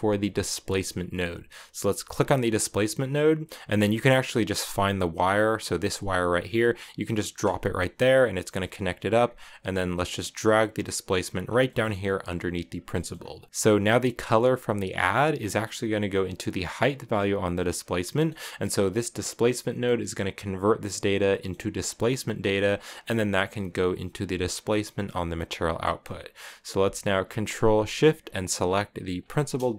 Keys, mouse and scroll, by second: 9.1-11.2 drag, 11.2 scroll down 3, 11.4 middle click, 12.2 click, 12.7-13.5 scroll up 3, 12.7 middle click, 13.2 middle click, 13.5-15.0 drag, 15.2-17.8 drag, 17.8-18.8 middle drag, 18.8 click, 19.3 scroll down 1, 19.4-21.0 middle drag, 21.0-22.5 scroll up 2, 21.0 middle click, 22.5 click, 25.5 scroll down 1, 25.6-28.8 middle drag, 29.0 ctrl+shift+click, 29.4 click.